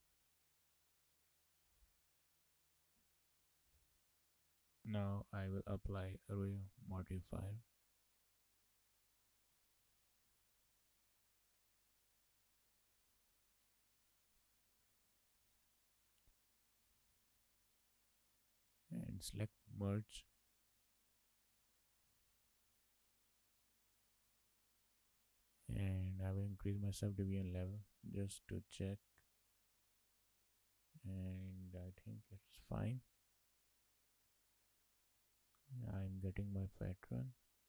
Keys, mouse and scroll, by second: 3.0 shift+s, 4.4 shift+middle click, 4.8-5.3 scroll up 2, 6.8 click, 7.9 click, 9.7 shift+middle click, 10.1-10.6 scroll up 3, 10.8 shift+middle click, 12.9-14.6 scroll up 3, 16.1 click, 20.1 Left, 20.6 Left, 22.1 Left, 24.1-26.3 scroll down 4, 26.3 Left, 27.0 Left, 27.9 scroll up 3, 29.2 scroll down 2, 31.8 shift+middle click, 34.4 shift+middle click, 35.1 scroll down 2, 35.4 shift+middle click, 36.9 click.